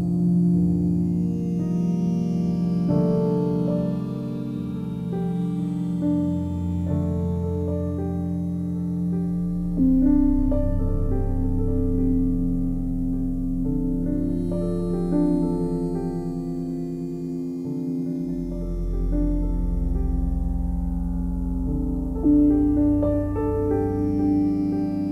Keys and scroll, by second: 20.3 i.